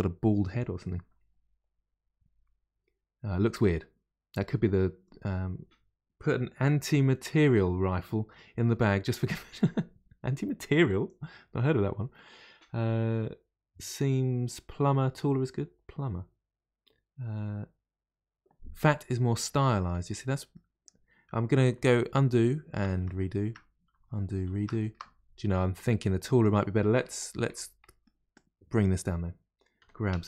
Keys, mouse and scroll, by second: 19.5-20.2 middle drag, 20.2-20.5 scroll down 1, 20.5-21.8 middle drag, 21.8 ctrl+z, 23.0 ctrl+shift+z, 23.9 ctrl+z, 24.5 ctrl+shift+z, 26.0-27.1 middle drag, 27.1 click, 27.4 Tab, 27.8 middle click, 28.3 click, 29.8 g.